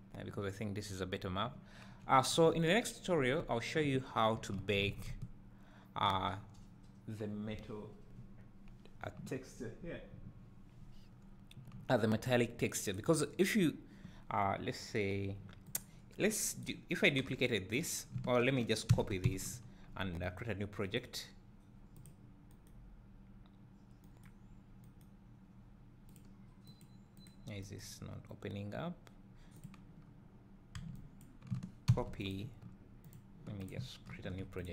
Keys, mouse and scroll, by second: 2.6 Tab, 3.4 Tab, 4.9 alt+a, 5.2 `, 13.9 scroll down 1, 15.8 click, 16.1 scroll down 1, 17.8 b, 22.1 click, 27.4 click, 29.8-32.3 drag, 31.2 b.